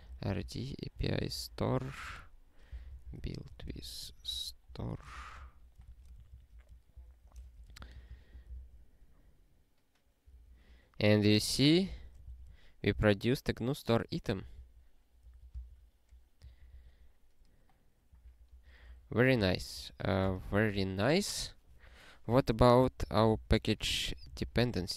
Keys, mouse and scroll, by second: 0.0-5.8 typing, 6.1 alt+s, 6.9 ctrl+n, 7.4 alt+^, 7.7 ctrl+n, 8.0 ctrl+n, 8.0 ctrl+n, 8.3 ctrl+e, 18.9 super+o, 19.4 ctrl+p, 19.5 ctrl+p, 19.7 ctrl+p, 20.0 ctrl+a, 20.3 Return, 20.6 ctrl+s, 22.8 ctrl+n, 23.0 ctrl+e, 23.3 alt+b, 23.5 alt+d, 23.6-24.9 typing.